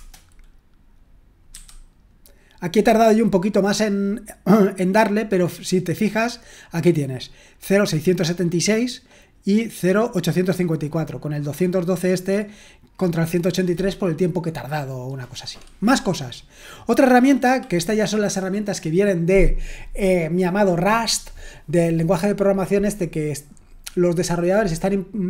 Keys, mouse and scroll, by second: 1.5 q, 6.4 click, 10.0-17.6 drag.